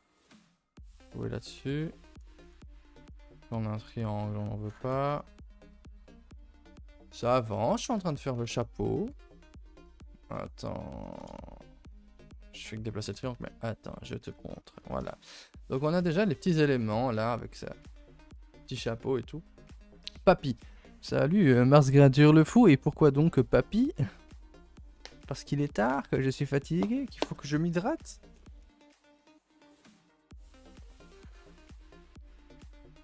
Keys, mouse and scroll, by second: 1.5-2.6 middle drag, 2.6 a, 3.0 click, 3.3 middle click, 3.8 a, 4.0 a, 4.6 2, 5.1 click, 6.4 ctrl+Delete, 6.9-9.0 typing, 8.0 ctrl+s, 11.9 a, 12.0 a, 13.0 KP_0, 14.5 scroll down 3, 14.7 a, 14.8 a, 15.1-16.5 shift+middle drag, 16.5 a, 16.6 a, 16.9-17.3 scroll down 1, 17.3-20.1 scroll up 1.